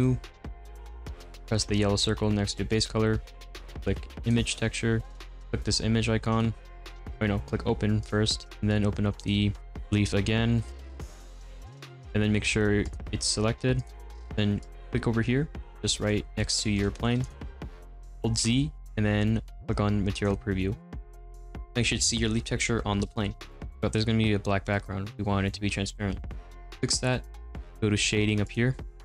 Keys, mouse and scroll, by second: 0.0-7.0 drag, 8.1-10.7 drag, 12.9 click, 13.8 click, 15.9-20.7 middle drag, 20.7 z, 21.3-22.1 scroll up 1, 22.4-29.0 middle drag.